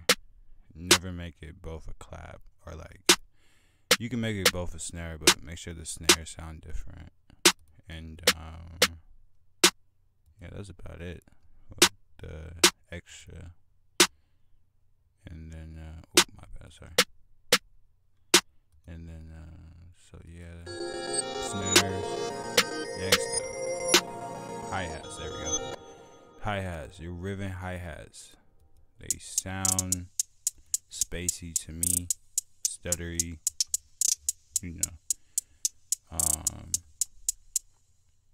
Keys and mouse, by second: 1.1 click, 4.3 click, 11.5 click, 12.1 drag, 14.9 F1, 17.2 click, 17.6 F1, 20.0 click, 20.8 click, 22.6 click, 22.7 F1, 23.8 click, 26.7 click, 28.2 click, 28.5 click, 30.2 F1, 30.2 click, 30.9 F1, 30.9 click, 36.3 F1, 36.3 click, 36.9 drag.